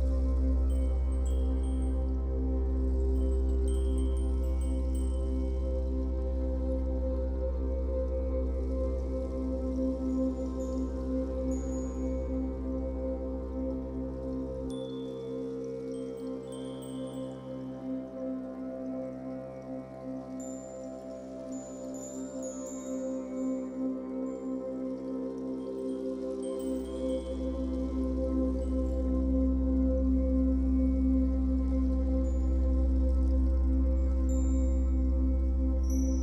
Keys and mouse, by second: 0.2 ctrl+s, 1.3 0, 2.6-5.2 drag, 10.9 click, 13.7 click, 14.7-16.0 ctrl+alt+drag, 17.1 ctrl+alt+click, 18.2 click, 18.9 click, 19.9-24.1 drag, 24.6 alt+click, 25.7 click, 25.9 alt+click, 28.0 click, 29.7-34.2 drag, 35.1 g, 35.4 click, 35.9-36.2 drag.